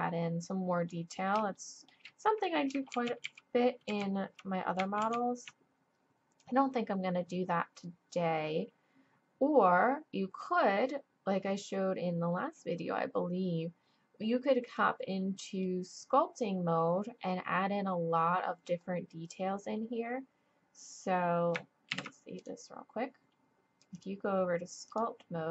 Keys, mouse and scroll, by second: 2.9 ctrl+z, 3.3 ctrl+z, 3.9 ctrl+z, 5.0 ctrl+z, 14.9-18.8 middle drag, 22.4 ctrl+s, 25.2-25.5 drag.